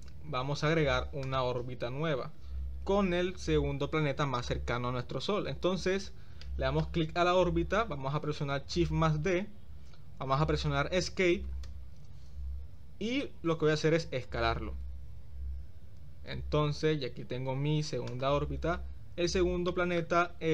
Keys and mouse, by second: 0.0 click, 1.2-1.5 drag, 2.2 Tab, 2.4 click, 4.3 click, 6.5-6.9 shift+middle drag, 9.1 shift+d, 14.9 s, 19.7-20.1 shift+middle drag.